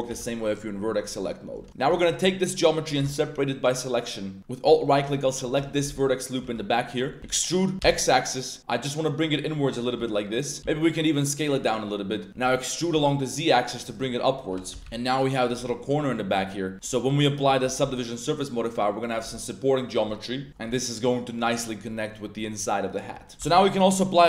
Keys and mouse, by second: 0.1 l, 1.5 Tab, 1.7 alt+3, 1.7 alt+click, 2.1 g, 2.9 p, 4.4 z, 4.8 alt+right click, 5.6 shift+middle click, 6.1 middle click, 6.7 click, 6.7 z, 7.1 click, 7.2 e, 7.8 x, 9.2 click, 10.0 s, 10.4 click, 10.6 s, 11.4 click, 11.6 middle click, 12.3 e, 12.9 z, 13.8 click, 14.2 middle click, 14.7 x, 14.9 middle drag, 14.9 z, 15.6 z, 15.7-16.1 drag, 16.4-16.8 drag, 16.8 z, 17.2 ctrl+1, 17.6 ctrl+2, 18.1-18.6 drag, 19.3 z, 19.3-19.7 middle drag, 20.0 middle click, 20.4 a, 20.7 middle drag, 20.7 a, 21.0 click, 21.4 click, 21.9 middle drag, 23.2 click, 23.3 Tab, 23.5 Tab, 23.5 drag, 23.7 ctrl+1.